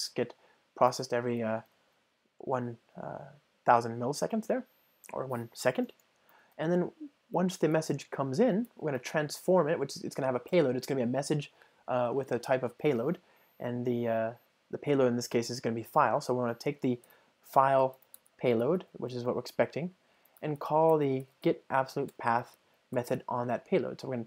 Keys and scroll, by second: 7.4 Return, 22.1 Return.